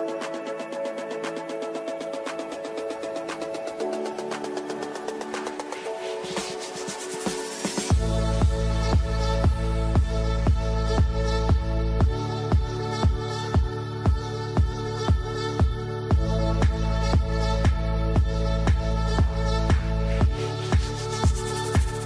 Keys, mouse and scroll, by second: 0.0 right click, 1.1 click, 1.7 shift+4, 2.4 ctrl+space, 3.5-6.7 drag, 7.3 shift+click, 7.4-8.2 typing, 8.3 click, 9.2-10.7 shift+drag, 10.7-11.9 alt+drag, 11.9 ctrl+g, 12.8-14.1 drag, 14.7-17.2 shift+drag, 17.2-21.0 alt+drag, 21.0 ctrl+right click, 21.5 ctrl+r.